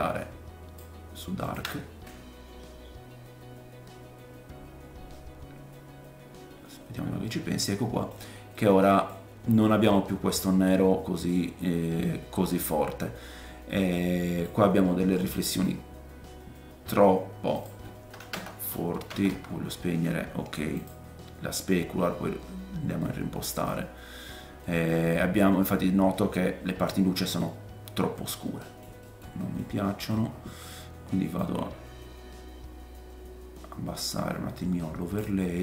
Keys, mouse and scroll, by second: 1.5 ctrl+shift+click, 7.2 middle click, 8.5 middle click, 9.6 middle click, 13.7 middle click, 14.8-17.5 scroll up 11, 15.5 middle click, 15.8-35.6 drag, 17.5-20.8 middle drag, 17.5-20.8 right drag, 22.4-23.0 scroll down 3, 23.0 middle click, 25.6 middle click, 27.1 middle click, 27.6-28.6 scroll down 5, 28.6 middle click, 29.0 middle click, 29.8 middle click, 30.3-31.4 scroll up 4, 31.4-35.6 middle drag, 31.4-35.6 right drag.